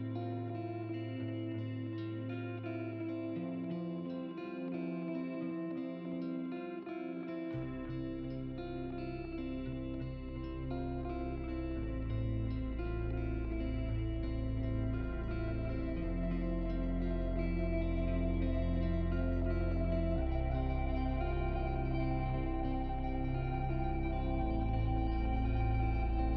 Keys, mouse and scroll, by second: 2.4 g, 5.2 shift+click, 7.4-11.8 drag, 14.7 s, 17.5 click, 17.7 right click, 18.0 middle click, 18.1 click, 21.1 g, 23.9 click, 24.5 middle click, 25.6 g.